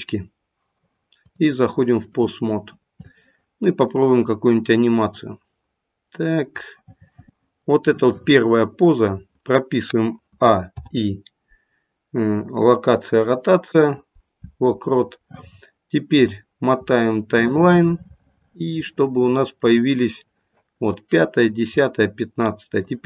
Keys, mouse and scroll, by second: 1.2 click, 5.0 click, 10.3 a, 10.7 i, 16.2-16.8 scroll up 1, 16.8-17.4 scroll up 7, 17.4 middle click, 17.4-20.0 scroll up 8, 20.0 middle click, 22.8 click.